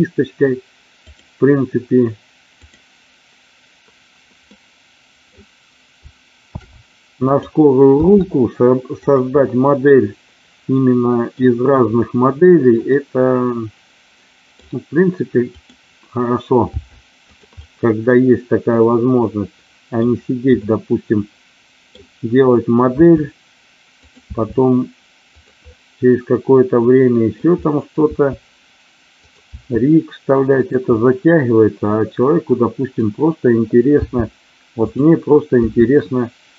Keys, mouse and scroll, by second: 0.9 click, 2.5 click, 4.5 middle click, 6.6 shift+d, 7.3 click, 7.9 r, 9.3-11.3 middle drag, 12.9-14.5 middle drag, 15.4 click, 16.6 g, 17.6-19.9 middle drag, 20.5-21.8 middle drag, 22.9 e, 23.9 click, 24.2 e, 25.3 click, 25.8-27.3 middle drag, 27.7 middle click, 28.1 e, 29.2 click, 29.4 e, 30.5 click, 30.9-32.9 middle drag, 33.9 g, 34.8 click, 35.7 e.